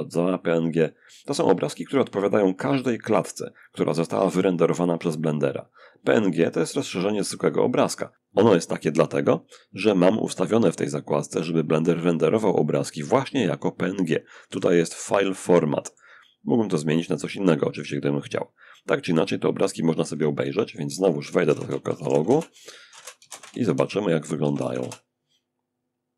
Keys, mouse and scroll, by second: 5.8-7.2 drag, 7.9 click, 9.9 click, 10.4-12.6 scroll down 1, 13.9-15.7 ctrl+middle drag, 19.6 alt+F1, 20.6 alt+c, 20.7 alt+d, 20.7 alt+space, 20.8-24.3 typing.